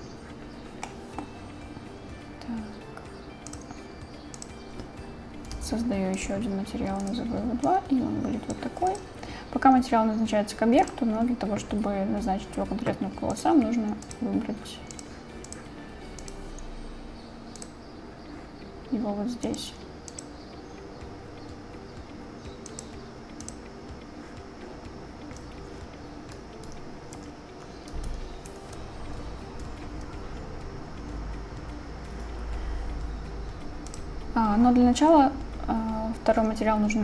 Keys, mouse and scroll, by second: 1.2 click, 3.6 click, 4.9-6.5 drag, 11.1 click, 13.2-14.8 drag, 15.0 click, 19.6 click, 22.9-24.0 drag, 27.3 Page_Down, 28.2 Page_Up, 28.2 ctrl+Down.